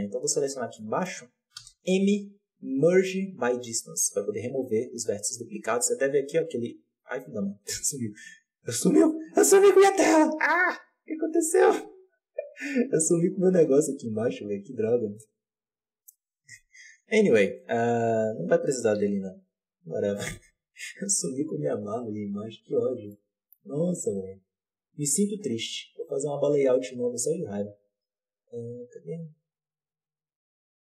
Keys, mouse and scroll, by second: 0.7-1.5 middle drag, 1.5 m, 5.9-9.1 drag, 14.0-17.6 drag, 17.8-18.9 drag, 18.9 n, 23.0-25.8 middle drag, 25.8 click.